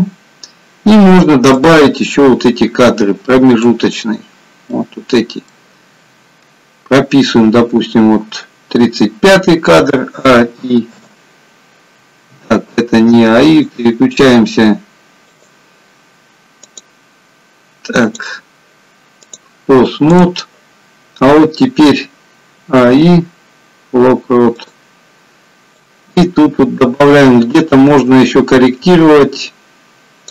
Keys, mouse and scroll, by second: 1.9 click, 1.9-2.7 scroll up 1, 4.8 middle click, 6.1-6.9 scroll down 2, 6.9 scroll down 1, 10.6-11.0 a, 11.0 i, 13.5 click, 15.4 click, 17.1 click, 17.9 click, 19.3 click, 22.6 a, 22.9 i, 26.0 click.